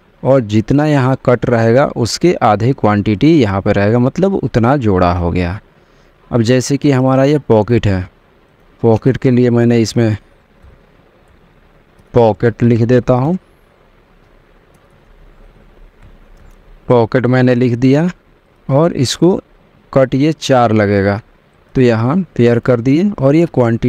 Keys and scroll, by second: 10.0-14.0 typing, 15.3 BackSpace, 16.5 e, 16.9 t.